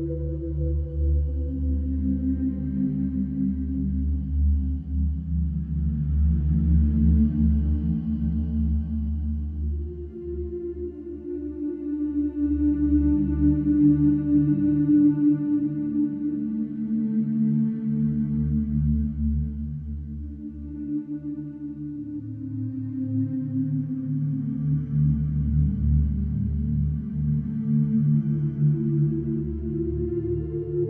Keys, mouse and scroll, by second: 0.3 alt+q, 1.4 click, 2.0 right click, 3.7 click, 8.6 click, 12.0 click, 13.3 click, 14.4 click, 15.5 click, 18.9 right click, 21.2 click, 21.9 right click, 22.8 click, 25.7 Delete, 26.5 click, 28.2 right click, 29.9 click.